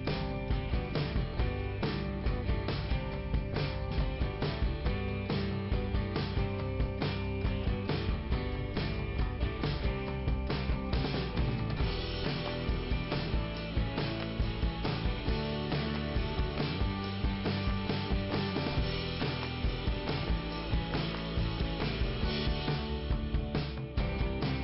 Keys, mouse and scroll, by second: 0.3 middle click, 2.2 middle click, 3.3 ,, 3.9 click, 4.7 click, 8.2 click, 11.0 scroll up 2, 13.0 click, 15.8-16.1 scroll down 2, 20.2-20.8 scroll up 1, 21.7 click.